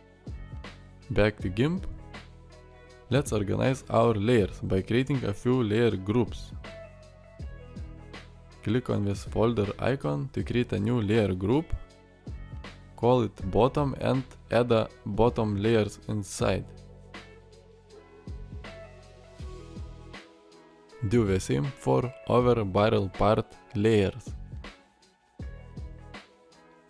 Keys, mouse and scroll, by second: 0.4 Tab.